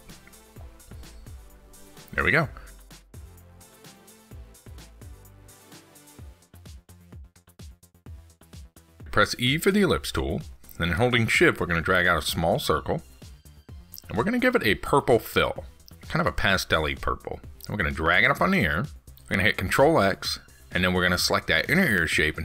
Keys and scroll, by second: 19.7 ctrl+x.